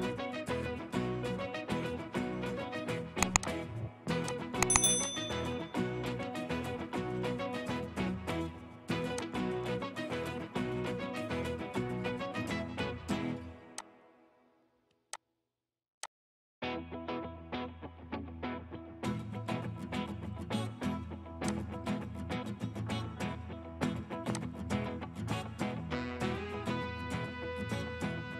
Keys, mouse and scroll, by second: 5.9 middle click, 7.8 scroll down 1, 10.7-11.2 scroll up 1, 17.4 scroll up 1, 18.2 middle click, 18.4 scroll up 1, 25.4 middle click, 27.7 scroll down 1, 27.9 scroll up 1, 28.0 middle click.